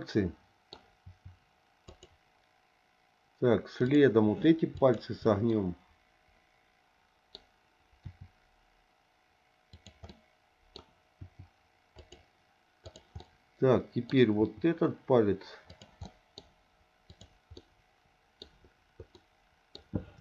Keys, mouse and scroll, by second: 1.9 r, 3.8 click, 4.8 shift+click, 5.5-7.4 middle drag, 7.9 r, 10.1 middle click, 11.2 r, 12.8 click, 13.2 middle click, 14.4 r, 16.1 middle click, 17.1 click, 17.6 middle click, 19.1 middle click.